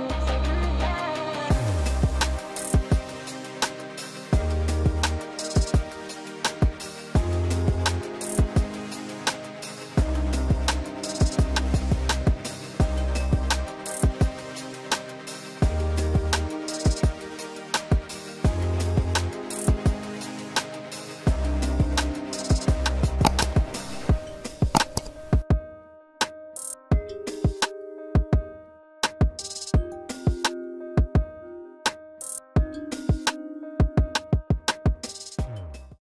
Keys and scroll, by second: 13.2 ctrl+s, 17.2 ctrl+s.